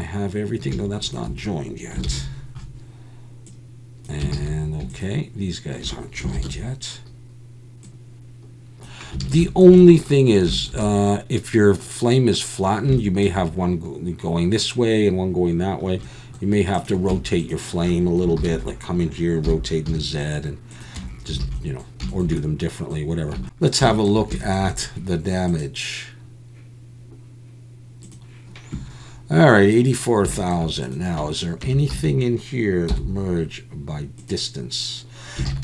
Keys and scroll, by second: 2.1 ctrl+j, 4.3 ctrl+z, 6.4 ctrl+j, 9.2 alt+a, 17.2 Tab, 18.4 ctrl+l, 19.4 r, 19.9 z, 21.0 Tab, 21.4 alt+a, 23.7 shift+c, 23.7 alt+a, 31.7 Tab, 31.9 a, 32.9 m, 35.5 alt+a.